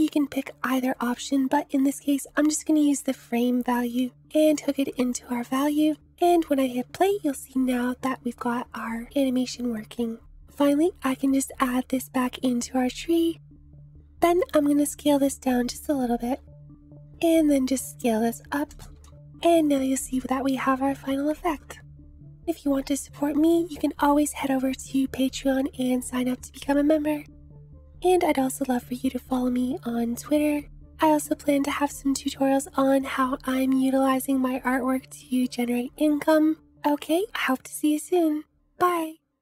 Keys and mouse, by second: 1.4-4.6 drag, 6.1 space, 10.4-12.0 drag, 13.5 space, 14.6-19.3 drag, 21.5 click.